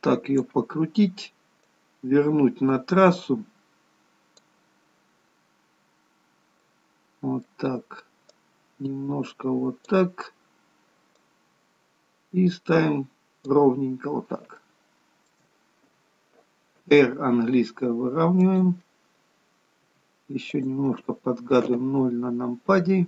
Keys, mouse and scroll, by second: 2.4 click, 5.3-6.3 scroll down 4, 6.8 middle click, 8.4 click, 11.3 click, 13.9-14.7 scroll up 7, 14.7 shift+middle click, 16.9 r, 21.7 KP_0.